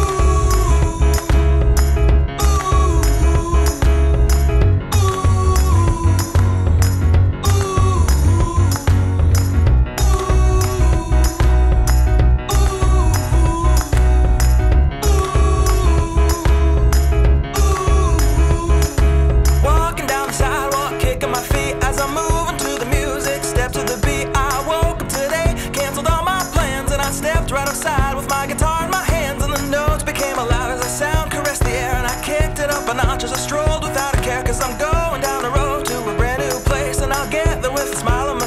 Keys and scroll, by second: 0.1 alt+1, 5.8 t, 8.8 super+c, 9.4 shift+super+c, 10.0 shift+super+v, 11.0 shift+super+v, 11.9 shift+super+v, 12.7 alt+shift+super+v, 13.8 alt+shift+super+v, 15.3 shift+super+v, 16.4 alt+shift+super+v, 18.0 alt+super+w, 21.8 super+c, 22.5 shift+super+c, 22.6 shift+super+a, 27.2 shift+super+v, 28.2 t, 32.9 alt+super+c, 34.2 shift+super+a, 35.3 shift+super+v, 37.0 shift+super+v.